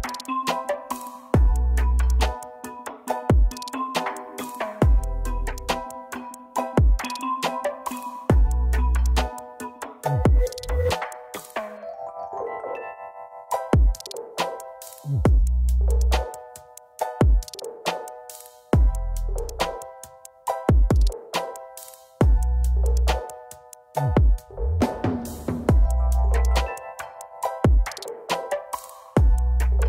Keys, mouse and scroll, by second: 7.5 double click, 9.7-10.6 typing, 11.5 ctrl+space, 15.4 ctrl+z, 29.0 typing.